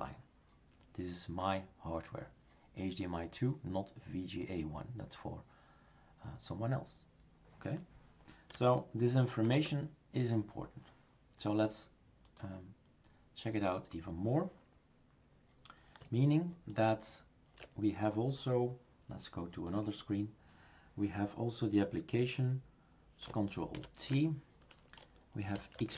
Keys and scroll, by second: 9.4 #, 23.7 ctrl+alt+t, 25.3-25.9 typing.